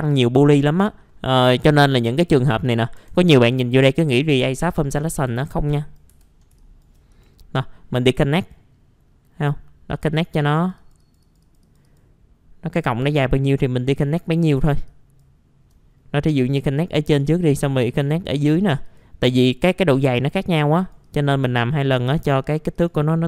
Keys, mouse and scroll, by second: 0.6-1.0 scroll down 1, 1.0 middle click, 2.8 scroll up 1, 3.0 F4, 4.7 middle click, 5.3 middle click, 5.7 click, 6.1 F4, 7.1 right click, 8.4 click, 8.8-9.9 scroll up 1, 9.9 click, 14.9 alt+click, 16.7 click, 17.8 right click, 18.8 click, 19.3-20.8 scroll up 1, 20.8 click.